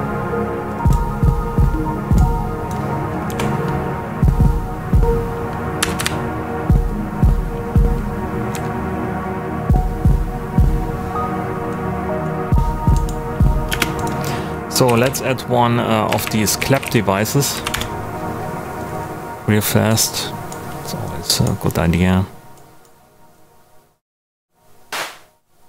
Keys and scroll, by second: 3.2 Right, 5.8 Left, 8.5 Right, 13.6-17.3 typing, 17.5 Down, 17.7 Return.